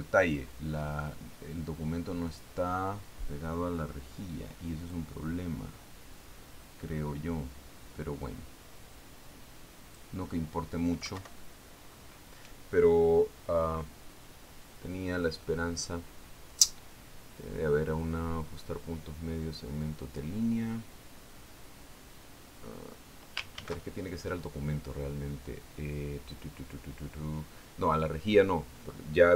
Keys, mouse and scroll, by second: 1.0-1.6 ctrl+scroll up 4, 1.9 ctrl+scroll down 2, 2.5 ctrl+click, 2.6-3.9 ctrl+middle drag, 6.4-11.7 drag, 12.7 alt+Up, 25.0 ctrl+shift+d.